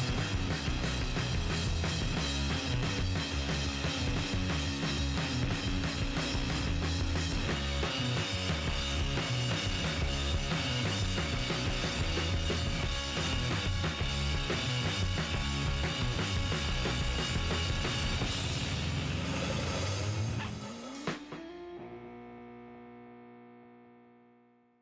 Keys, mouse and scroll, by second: 0.0 g, 1.3-3.8 middle drag, 1.3 g, 2.9 g, 4.0-5.0 middle drag, 6.6-8.0 right drag, 7.0 g, 8.7 g, 9.5 middle click, 10.8-15.4 middle drag, 12.3-14.1 right drag, 12.6 g, 15.5 middle click, 15.8-17.8 middle drag, 16.7 k, 21.5-24.8 middle drag, 22.3 ctrl+Tab, 24.0-24.8 right drag.